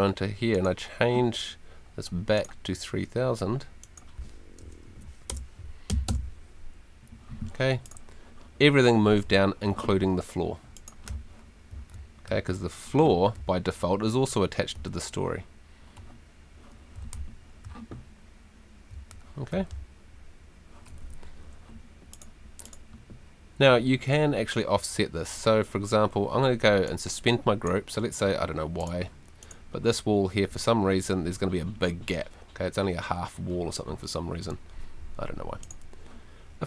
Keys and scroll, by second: 4.9 Left, 5.3 BackSpace, 5.9 3, 6.1 Return, 11.7 d, 13.3 a, 14.7 a, 16.7-17.6 typing, 18.9 d, 19.5 s, 21.2 Escape.